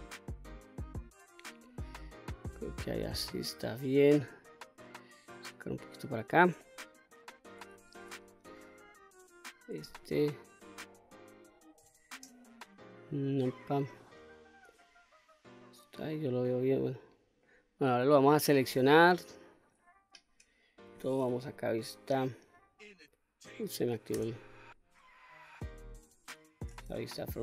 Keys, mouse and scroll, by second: 0.5-3.6 middle drag, 4.0 click, 4.9 click, 6.2-7.5 middle drag, 7.5 2, 8.4 click, 10.3 ctrl+r, 13.5 click, 14.4-17.0 middle drag, 17.4 middle click, 18.7 l, 18.7 k, 19.7-24.1 middle drag, 25.3 click, 26.7 KP_1.